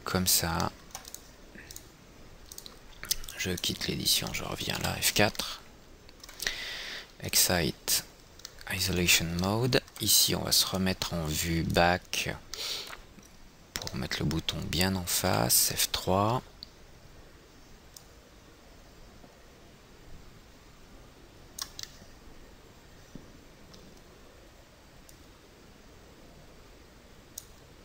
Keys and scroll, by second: 5.4 F4, 15.8 F3, 19.2 F3.